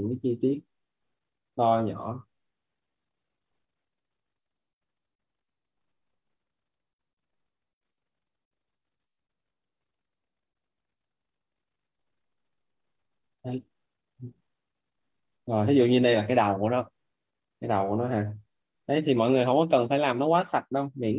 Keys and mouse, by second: 0.3 click, 1.2 right click, 2.7 click, 3.1 right click, 4.2 click, 5.3 right click, 7.1 click, 8.6 right click, 9.1 click, 9.4 right click, 11.0 click, 12.0 right click, 13.7 click, 14.0 right click, 14.5 click, 14.8 right click.